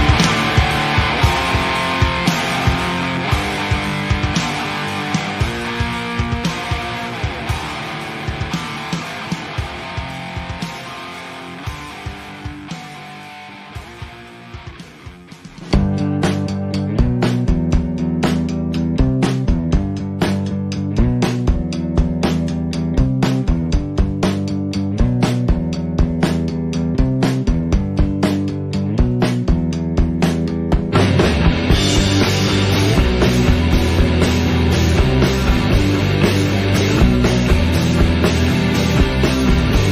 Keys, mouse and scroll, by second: 0.1 alt+a, 1.6 click, 1.8-2.6 middle drag, 2.6 scroll up 1, 2.7-3.1 middle drag, 3.1 KP_0, 3.5-4.1 scroll down 7, 4.1-4.5 shift+middle drag, 4.5 scroll up 1, 4.6 scroll down 1, 4.9 shift+middle click, 5.1 scroll up 1, 5.3 alt+a, 5.9 click, 6.7-7.9 scroll down 14, 6.9 middle drag, 7.9 click, 8.1-8.5 scroll down 4, 8.5 Delete, 9.4 KP_0, 9.8-10.7 scroll up 6, 10.7 shift+s, 10.8 shift+a, 14.5-15.1 scroll down 4, 15.1 click, 16.4-16.9 scroll up 4, 16.9-17.3 scroll down 11, 17.3-18.1 middle drag, 18.1 KP_0, 19.5 Delete, 19.7 scroll up 1, 20.0 shift+a, 21.2 click, 21.9-22.3 scroll down 1, 22.3 KP_1, 22.6-23.2 scroll down 1, 23.2 click, 23.6 KP_7, 24.1 click, 24.5 KP_3, 25.2 r, 26.0 click, 27.0 shift+d, 27.4 r, 28.2 g, 30.4 click, 31.1 click, 32.0 click, 32.4 KP_0, 32.7-33.1 scroll up 4, 33.1-33.6 shift+middle drag, 33.6-34.2 scroll up 1, 34.2 alt+a, 35.3 click, 36.4 Tab, 39.6 click, 39.8 Tab.